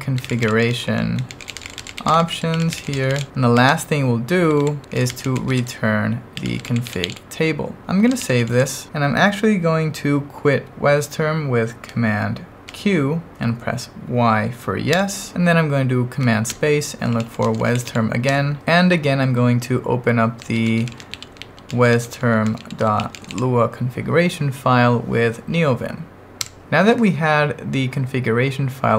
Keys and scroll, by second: 0.0-8.9 typing, 12.6 super+q, 14.9 y, 16.5 super+space, 16.8-18.4 typing, 20.2-23.8 typing, 26.5 Return.